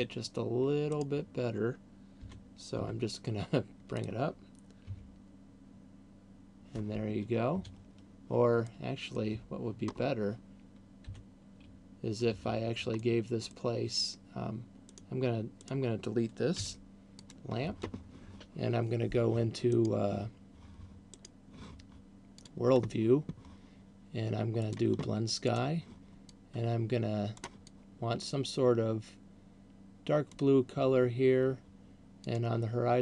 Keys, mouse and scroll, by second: 1.5 right click, 2.5 g, 4.5 click, 7.7 Escape, 9.0 middle click, 10.0-10.7 scroll down 3, 11.5 g, 13.5 middle click, 15.0 right click, 16.0 right click, 17.0 Delete, 20.0 right click, 21.2 right click, 22.7 click, 25.0 click, 26.0 click, 32.5 click.